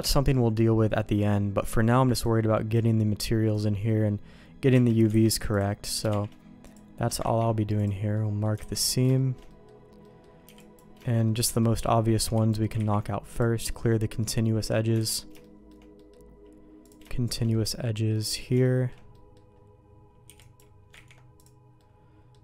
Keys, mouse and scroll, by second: 0.0 KP_Divide, 0.8 middle click, 2.8 click, 4.7 Tab, 5.1 alt+a, 5.5 click, 6.2 shift+g, 7.2 ctrl+e, 8.1 middle click, 8.6 alt+a, 9.1 shift+middle click, 9.4 middle click, 10.0 middle click, 10.4 b, 11.0 shift+middle click, 11.2 middle click, 12.2 b, 12.9 ctrl+e, 13.6-14.7 middle drag, 14.9 alt+a, 15.4 shift+middle click, 15.9 middle click, 16.8 click, 17.2 shift+click, 17.5 middle click, 18.6 shift+middle click, 19.1 middle click, 20.2 b, 20.9 ctrl+e, 21.7 middle click.